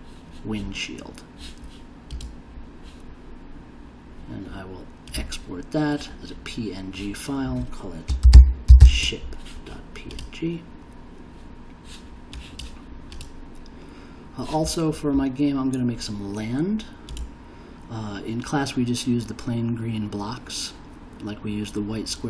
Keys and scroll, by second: 8.0-9.3 typing.